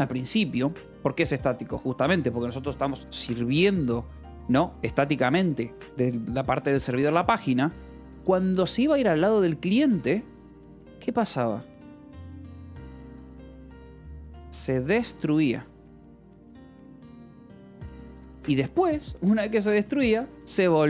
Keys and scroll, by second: 0.0-0.2 typing, 13.6-15.8 typing, 15.9 Escape, 17.9-20.8 typing.